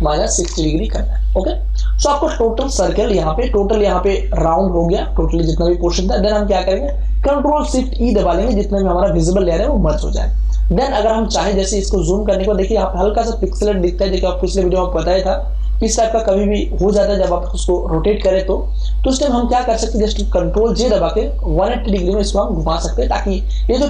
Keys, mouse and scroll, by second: 0.5 0, 1.9 Return, 8.1 ctrl+shift+e, 11.8 space, 12.2-15.9 ctrl+drag, 20.7 ctrl+j, 21.8 ctrl+t, 22.5 right click, 23.7 click.